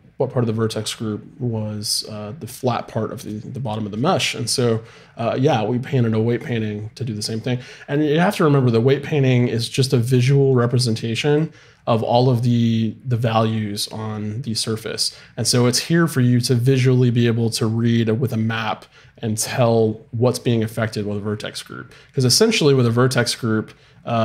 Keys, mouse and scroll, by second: 9.9-12.5 drag, 14.1 middle click.